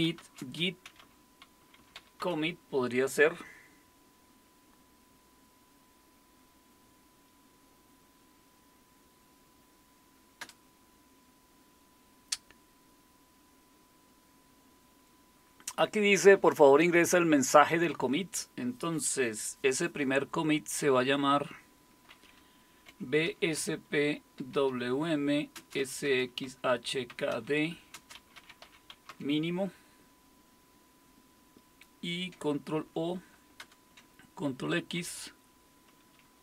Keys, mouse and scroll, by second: 0.0-2.7 typing, 10.4 Return, 22.6-29.6 typing, 32.8 ctrl+o, 33.6 Return, 35.0 ctrl+x.